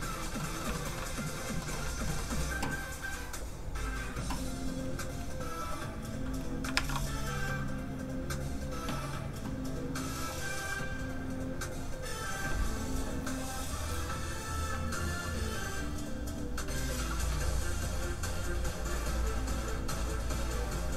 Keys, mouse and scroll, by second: 0.7 shift+middle click, 0.9 middle click, 1.0 middle click, 3.3 click, 6.6 shift+click, 6.7 shift+a, 7.0 shift+click.